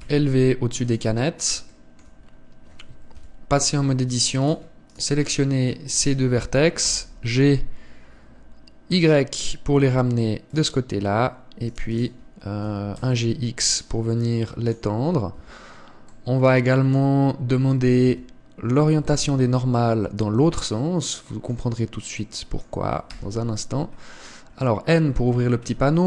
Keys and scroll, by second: 3.9 KP_7, 4.6 Tab, 13.4 g, 16.2 Tab, 18.8 Tab, 19.8 a.